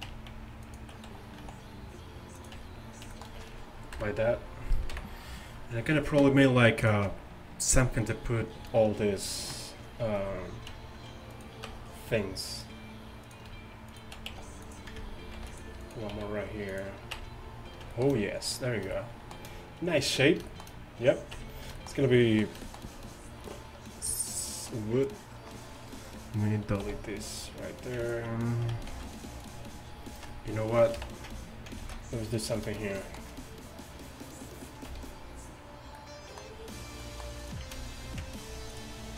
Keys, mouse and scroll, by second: 0.1 Tab, 1.5 s, 2.6 Tab, 4.0 KP_1, 4.0 KP_2, 5.0 KP_1, 11.7 Tab, 14.3 s, 15.4 ctrl+r, 16.2 s, 17.2 Tab, 21.4 Tab, 24.5-26.0 right drag, 26.9 x, 29.0 ctrl+f, 31.0 ctrl+KP_7, 31.9 ctrl+z, 34.9 c, 38.1 ctrl+f.